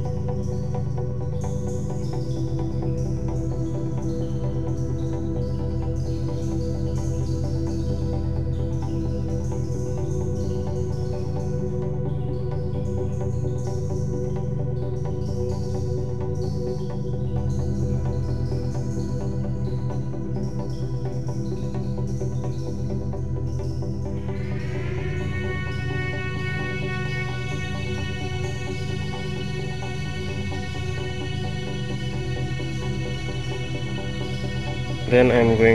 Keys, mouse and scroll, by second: 3.5 click, 4.3 s, 7.4 g, 12.3-13.5 scroll down 3, 13.5-14.6 shift+middle drag, 14.6-14.9 scroll up 3, 15.5-18.3 shift+middle drag, 18.3 click, 20.3 click, 23.8 a, 25.3 g, 33.6 click, 34.1 Tab, 34.6-35.4 scroll up 4.